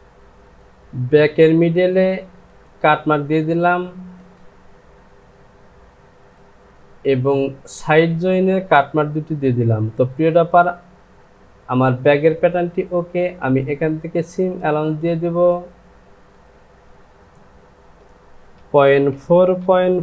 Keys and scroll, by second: 18.5 KP_Decimal, 19.2 KP_4, 19.6 Down.